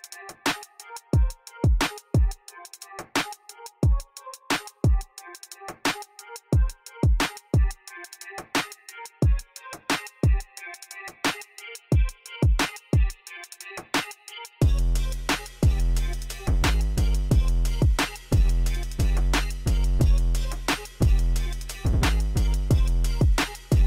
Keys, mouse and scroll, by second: 0.3 shift+click, 0.7 shift+click, 1.1 shift+click, 2.0 shift+click, 2.9 shift+click, 3.4 shift+click, 4.0 shift+click, 4.6 shift+click, 5.4 shift+click, 5.9 shift+click, 6.4 shift+click, 6.9 shift+click, 7.4 shift+click, 8.0 shift+click, 8.4 shift+click, 9.6 shift+click, 11.6 shift+click, 12.2 KP_5, 12.6 Return, 14.0 click, 14.7 KP_3, 14.9 Return, 18.7 click, 19.4 click, 20.0 KP_0, 20.2 KP_5, 21.3 click, 21.7 click, 22.2 KP_0, 22.5 KP_3, 22.7 Return.